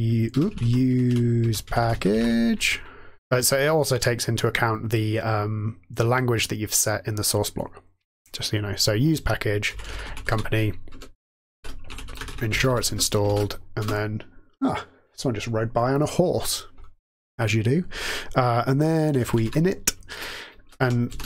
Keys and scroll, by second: 0.0-2.6 typing, 9.4-13.7 typing, 10.8 Return, 18.9-21.2 typing, 20.0 Return, 20.7 Tab.